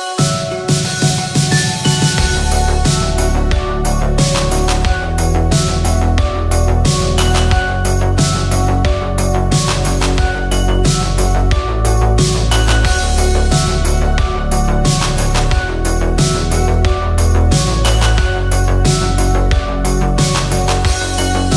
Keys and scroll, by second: 18.7 Escape.